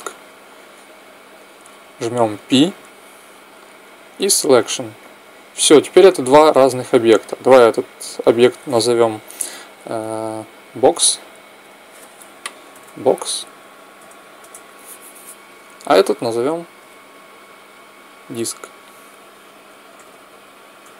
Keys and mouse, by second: 2.1 p, 5.4 Tab, 6.6 middle click, 7.2-9.1 right drag, 9.7 n, 11.4-13.4 drag, 16.2-18.2 right drag, 18.2-20.9 drag.